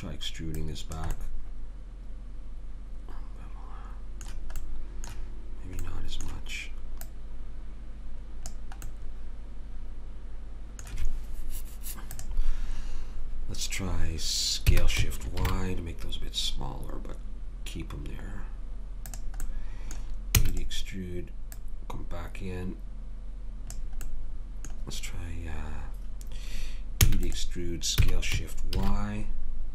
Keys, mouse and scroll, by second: 0.6 click, 2.4 middle click, 4.6-8.5 middle drag, 7.1 click, 8.9 middle click, 12.2 click, 14.7 s, 19.4 middle click, 20.4 e, 21.5 click, 24.0-26.1 middle drag, 27.0 e, 28.0 s.